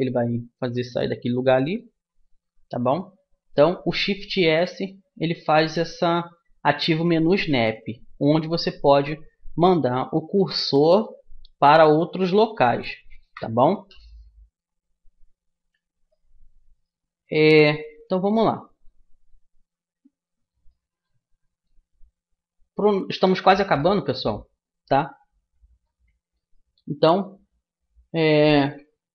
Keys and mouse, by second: 1.0-2.5 middle drag, 2.5 ctrl+z, 2.8-6.0 middle drag, 16.3-23.5 middle drag, 23.5 a.